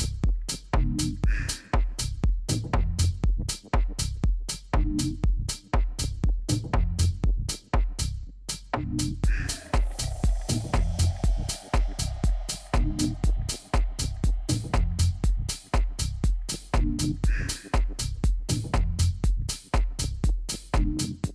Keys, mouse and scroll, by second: 2.1 Delete, 4.6 a, 5.1 a, 6.5-8.5 drag, 7.1 a, 7.5 a, 16.4-20.1 middle drag, 19.0 KP_3, 20.3 KP_1.